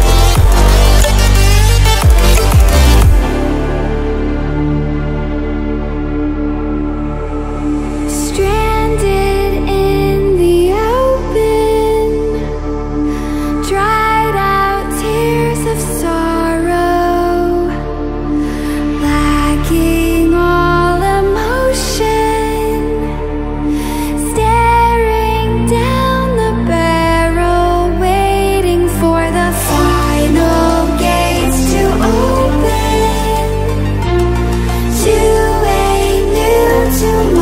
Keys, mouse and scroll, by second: 3.5 click, 9.5 click, 9.9 ctrl+alt+scroll up 1, 11.6-21.7 drag, 21.7 ctrl+alt+scroll down 1, 23.8-35.3 drag.